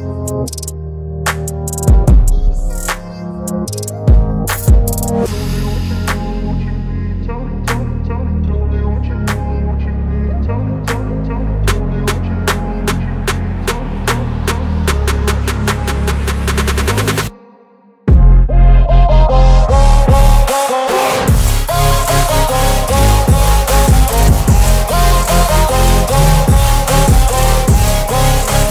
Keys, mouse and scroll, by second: 0.5-4.5 drag, 7.2 right click, 8.8 click, 10.2 right click, 11.1 click, 15.6 click, 20.2 ctrl+t, 22.1-23.4 drag, 23.8 alt+scroll down 1, 24.2-25.8 drag, 26.6-27.9 alt+drag.